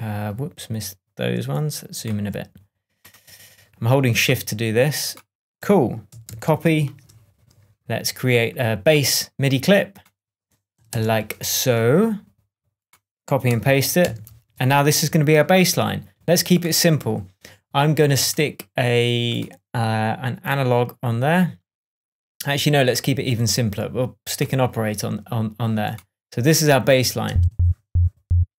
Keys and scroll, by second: 6.2 shift+super+c, 6.7 shift+super+Tab, 7.5 shift+Tab, 10.8 shift+super+m, 13.9 super+v, 14.8 shift+super+v, 14.9 shift+super+Tab, 27.2 space.